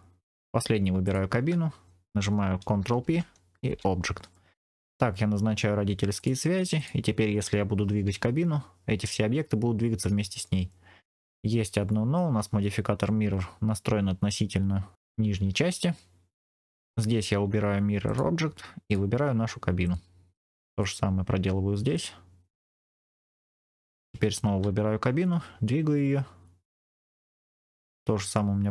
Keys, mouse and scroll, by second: 0.9 shift+click, 2.9 ctrl+p, 4.5 scroll down 2, 5.5-6.0 scroll down 2, 6.1 click, 6.7 click, 7.9 g, 14.9 right click, 16.5 middle click, 16.7 click, 17.9 click, 18.7 click, 20.6 click, 21.8 click, 22.6 click, 23.8 click, 25.3 g.